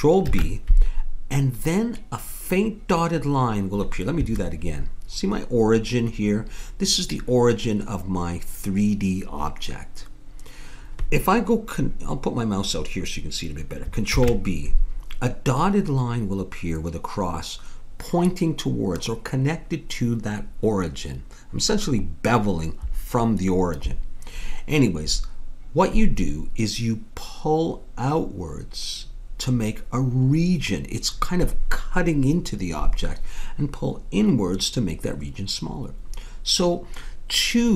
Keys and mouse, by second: 0.3 ctrl+b, 14.1 ctrl+b.